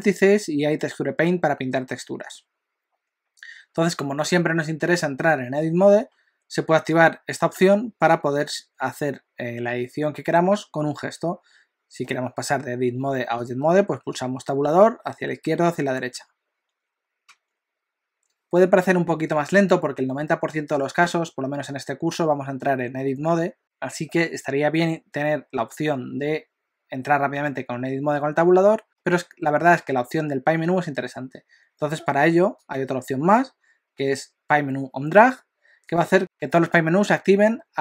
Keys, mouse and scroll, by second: 14.1 Tab, 14.8 Tab, 16.1 Tab, 31.9 F4.